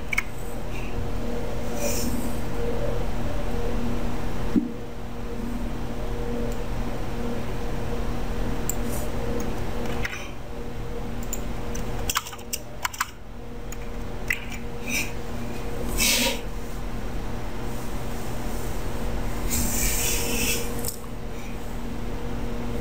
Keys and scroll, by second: 0.1 ctrl+v, 10.0 ctrl+c, 14.5 ctrl+v.